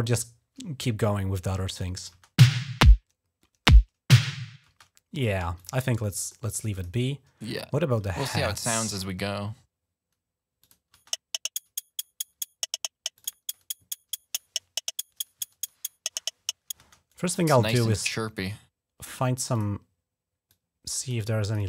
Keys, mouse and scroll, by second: 1.7 click, 1.9 space, 4.4 space, 5.4 click, 6.0 click, 6.5 click, 7.9 click, 10.4 click, 10.7 space, 12.9 click, 16.6 space, 17.0 right click, 19.3 click, 20.3 click, 21.2 click, 21.4 click.